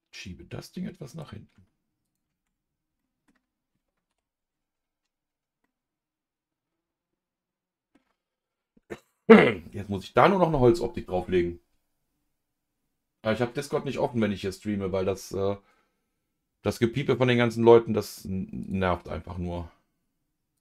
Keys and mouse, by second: 2.0 click, 2.4 Tab, 3.0 middle click, 4.1 KP_Divide, 5.6-7.9 middle drag, 8.4 click, 18.6-20.0 drag.